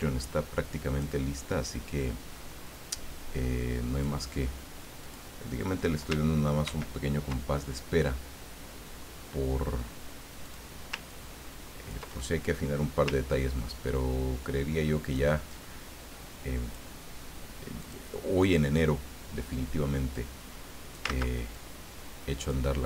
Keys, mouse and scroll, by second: 1.6-4.8 drag, 5.0 click, 6.6 ctrl+d, 10.4 click, 11.1-12.3 ctrl+drag, 12.3 middle click, 13.3-15.3 ctrl+drag, 15.4-17.6 ctrl+drag, 17.8 click, 20.1-21.1 drag, 21.1 ctrl+z, 21.5-22.7 ctrl+drag.